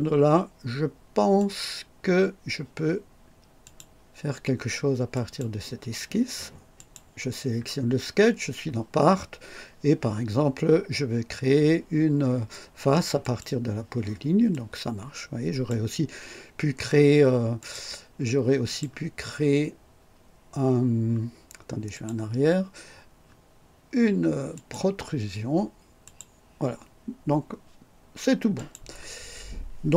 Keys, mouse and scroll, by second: 1.3 click, 3.6 click, 5.1 click, 6.7 click, 13.2 click, 14.5-15.8 drag, 17.5 click, 18.6 click, 21.9 click, 24.5 click, 26.0 click, 28.5 click.